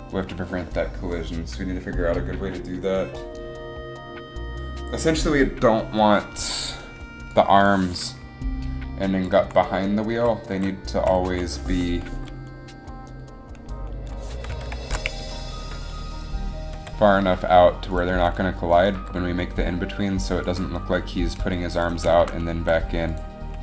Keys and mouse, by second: 7.5 click, 9.6 Up, 10.3 Right, 10.7 Right, 11.2 Right, 11.4 Left, 14.8 ctrl+KP_1, 16.8 g, 19.2 g, 19.3 g, 21.5 g, 22.7 r.